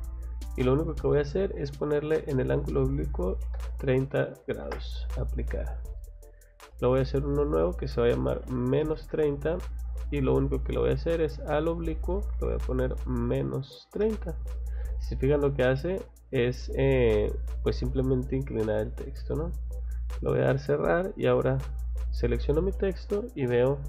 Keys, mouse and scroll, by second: 1.9 click, 6.6 click, 11.3 click, 12.4 Left, 15.9 click, 16.6 click, 19.4 click, 20.6 click, 21.0 click, 23.1 click.